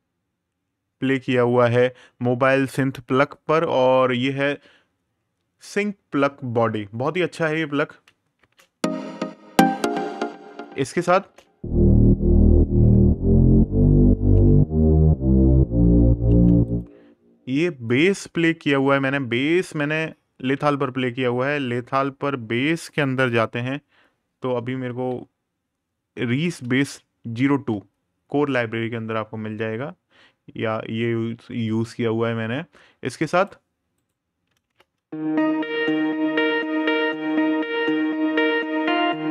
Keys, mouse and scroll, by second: 3.0 super+KP_Add, 5.0 super+KP_Subtract, 6.8 click, 8.1 space, 10.2 right click, 10.9 space, 16.0 space, 16.4 click, 23.1 super+KP_Add, 23.2-24.3 scroll down 1, 24.3 super+KP_Subtract, 24.8-25.3 scroll down 1, 26.2 super+KP_Add, 26.9 super+KP_Subtract, 31.4 click, 33.1 right click, 34.4 space, 39.1 click, 39.2 space.